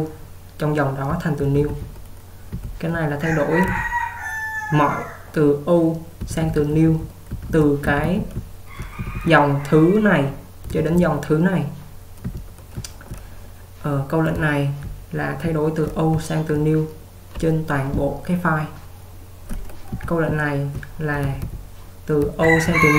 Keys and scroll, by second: 1.2-3.7 typing, 6.3-9.0 typing, 10.8 typing, 12.3-13.1 typing, 14.4-16.5 typing, 19.3-22.7 typing.